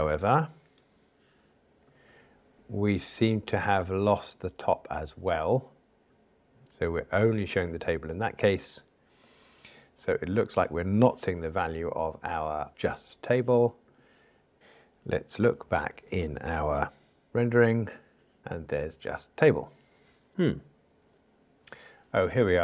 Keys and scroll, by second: 17.3 super+e.